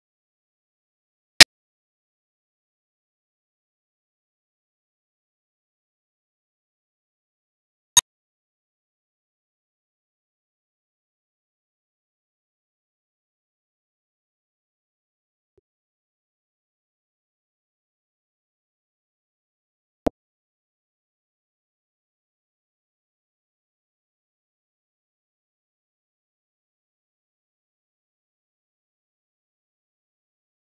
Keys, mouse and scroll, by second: 0.7 click, 1.6-1.9 scroll up 2, 1.9 middle click, 2.5-8.4 ctrl+shift+drag, 8.4 scroll down 4, 8.6-9.9 middle drag, 9.9-14.0 drag, 18.2 click, 18.3 shift+a, 21.3 scroll down 3, 21.5 middle click, 21.8-22.9 drag, 22.9-23.4 scroll up 6, 23.4 click, 23.6 shift+a, 26.2-29.0 drag, 29.0 middle click, 29.3 shift+d, 30.2 click.